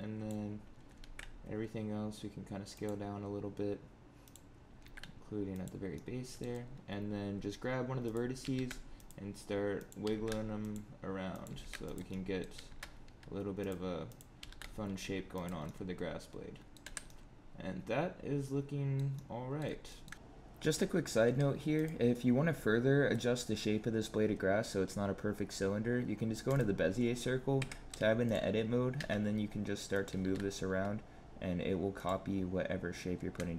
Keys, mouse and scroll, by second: 0.9 alt+s, 4.2 click, 4.7 alt+s, 5.9 middle click, 8.0 click, 8.3 g, 9.7 click, 9.9 g, 11.2 click, 11.4 g, 12.0 middle click, 12.4 g, 14.0 click, 14.3 g, 15.6 middle click, 16.8 Tab, 17.0 middle click, 19.1 middle click, 19.8 shift+middle click.